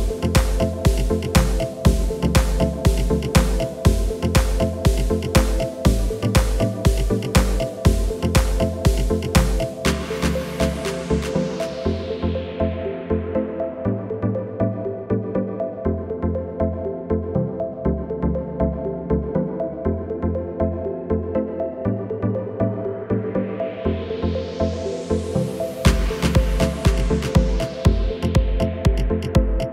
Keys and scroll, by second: 2.9 shift+e, 6.9 Tab, 12.2 Tab, 19.7 shift+e, 22.6 Tab, 25.1 KP_1.